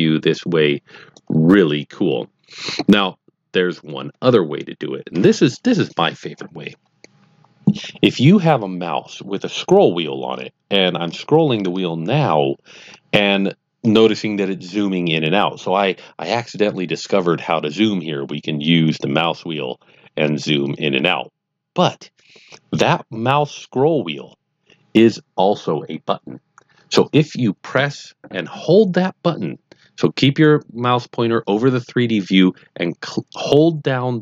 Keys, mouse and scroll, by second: 10.0-10.3 scroll down 2, 10.3 scroll up 2, 10.7-11.0 scroll down 2, 11.0-11.4 scroll up 1, 11.4-11.7 scroll down 1, 11.7 scroll up 1, 12.1-12.7 scroll down 1, 12.7 scroll up 2, 13.3-13.7 scroll down 2, 13.7-14.1 scroll up 2, 14.1-14.6 scroll down 1, 14.6 scroll up 1, 14.9-16.6 scroll down 1, 19.1-19.4 scroll down 3, 19.4-19.8 scroll up 2, 19.8-20.1 scroll down 1, 20.1 scroll up 2, 20.6 scroll down 1, 20.9-21.6 scroll up 1.